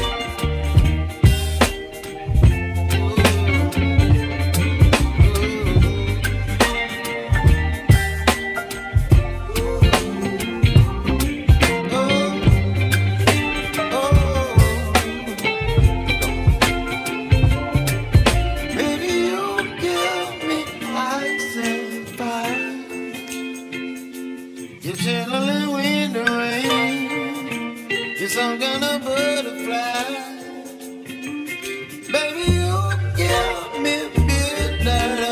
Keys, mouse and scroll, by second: 0.3 shift+click, 0.7 shift+click, 1.5 x, 2.3 x, 3.1 middle click, 5.0 scroll up 1, 5.3 scroll down 2, 5.9 click, 7.9 g, 10.3-12.9 drag, 15.5 f, 16.7 g, 24.3-25.0 scroll up 5, 25.0 shift+middle click, 25.7-26.4 scroll down 1, 26.4-28.8 middle drag, 30.0 ctrl+z, 31.3 click, 31.7 click, 34.0 g.